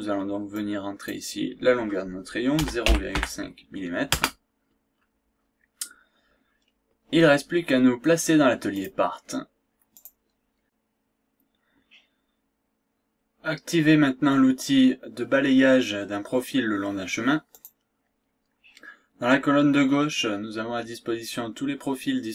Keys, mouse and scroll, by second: 0.5-1.6 drag, 2.5 KP_0, 2.8 ,, 3.1 KP_5, 4.1 KP_Enter, 5.6-5.9 scroll down 2, 6.1 scroll up 1, 6.5 scroll down 1, 6.9-7.3 scroll up 1, 8.7 click, 10.0 click, 17.5 click.